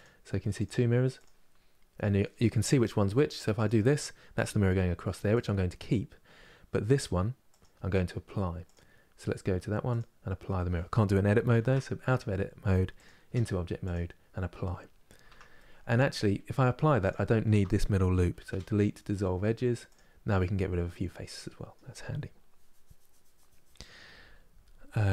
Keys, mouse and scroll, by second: 3.2 click, 5.0 click, 6.5 click, 7.2 click, 12.7 click, 12.9 Tab, 13.6-14.9 drag, 14.9 Tab, 15.2-16.7 middle drag, 16.7 alt+click, 19.6 Delete, 20.0-25.1 middle drag.